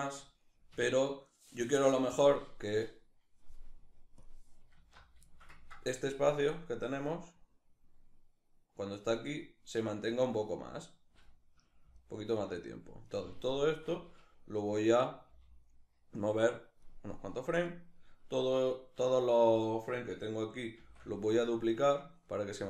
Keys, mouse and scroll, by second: 0.4 Escape, 3.8 click, 4.4 alt+q, 4.9-6.0 ctrl+shift+middle drag, 6.0-9.5 drag, 9.5 right click, 11.6 alt+right click, 12.3 alt+shift+right click, 12.7 alt+shift+right click, 14.9 g, 16.4 click, 17.3 right click, 20.4 shift+d, 21.8 click.